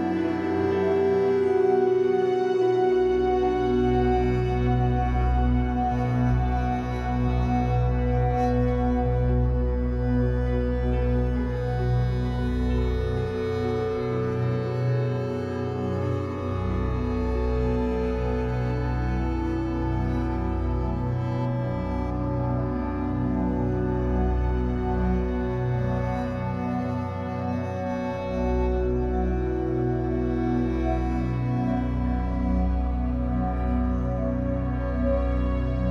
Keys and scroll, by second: 5.2 3, 6.1 shift+Tab, 6.7 Escape, 7.2 3, 8.9 b, 11.5 w, 25.5 3, 26.8 r, 29.4 b, 35.5 b.